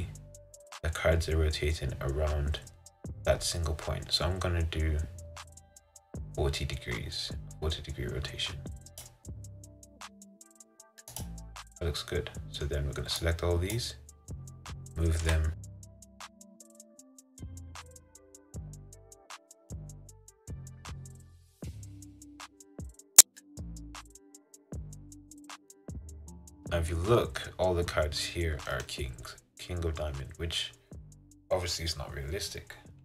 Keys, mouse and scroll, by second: 11.9-13.9 middle drag, 13.9 click, 15.4 g, 17.3 middle click, 17.5 scroll down 2, 17.7 middle click, 18.0 r, 18.9 g, 19.4 g, 19.9-21.0 middle drag, 21.0 ctrl+z, 21.1 ctrl+z, 21.2 ctrl+z, 21.5 middle click, 22.3 g, 23.2 r, 24.2 g, 24.9 g, 25.5 middle click, 25.9 click, 26.0-27.7 middle drag, 27.7-28.8 scroll up 3, 28.8-30.3 shift+middle drag, 30.3-33.0 scroll down 1.